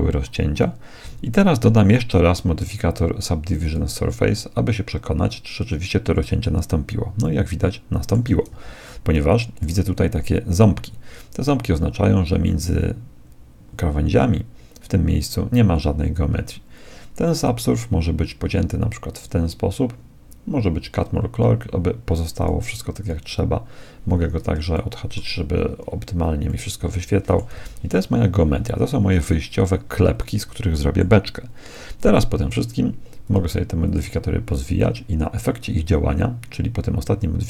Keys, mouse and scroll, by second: 3.6-5.6 drag, 7.2-11.9 middle drag, 8.8 z, 17.4-19.1 drag, 22.4-24.8 drag, 24.8-30.1 middle drag, 27.6 z, 31.7-33.2 middle drag, 33.2-35.6 drag.